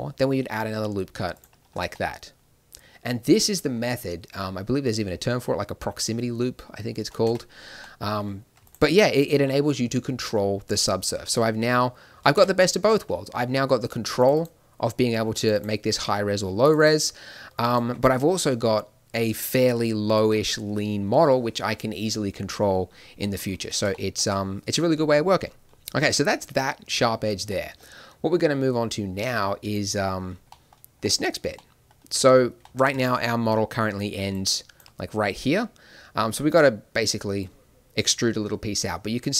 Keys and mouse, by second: 1.7 Tab, 7.2 Tab, 8.6-10.3 right drag, 12.3 Tab, 13.6-15.5 middle drag, 15.8-17.9 middle drag, 17.9 Tab, 23.6 middle click, 27.6 middle click, 29.2 click, 29.4-31.6 middle drag, 33.7 d, 34.2 click, 34.7 d, 37.3 d.